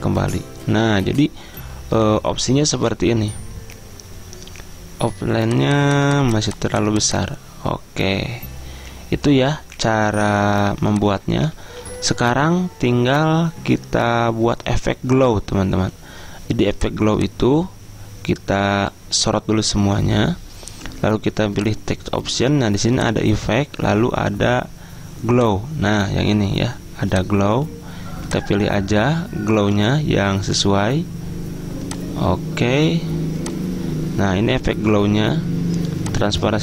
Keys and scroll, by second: 11.7 ctrl+z.